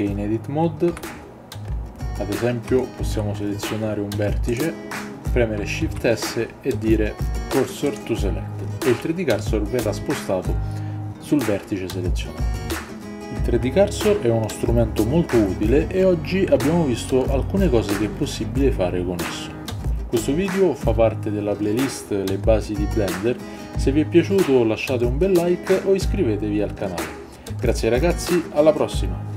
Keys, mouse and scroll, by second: 0.9 Tab, 2.8 shift+middle click, 4.4 click, 5.8 shift+s.